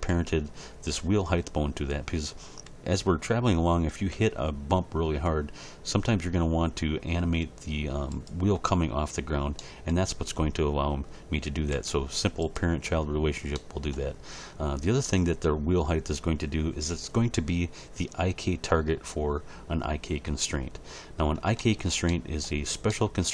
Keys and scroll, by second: 4.2 g, 11.7 g.